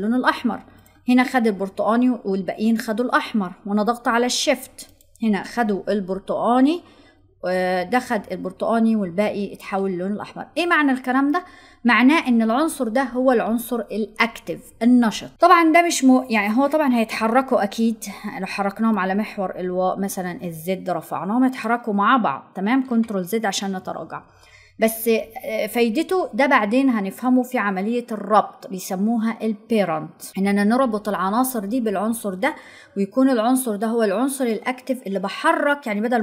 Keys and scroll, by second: 23.2 ctrl+z.